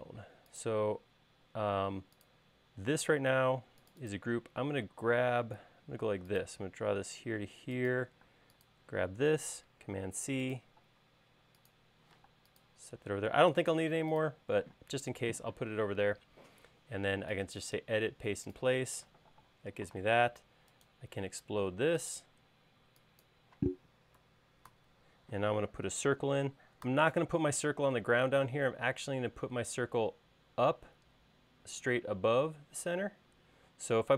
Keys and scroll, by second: 2.1 space, 5.6 l, 8.5 space, 10.2 super+c, 12.4 m, 20.3 e, 22.9 e, 25.0 super+s, 27.2 c.